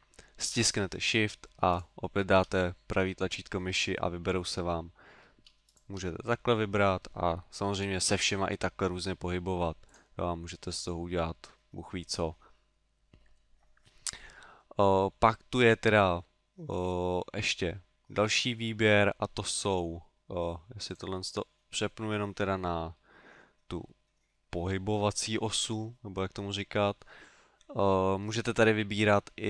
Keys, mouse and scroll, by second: 1.7 shift+right click, 3.5 middle click, 4.8 middle click, 5.7 shift+right click, 6.2 middle click, 7.8 g, 10.0 click, 10.3 middle click, 13.4 middle click, 14.4 middle click, 15.1 middle click, 20.9 click, 22.5 middle click, 26.5 middle click.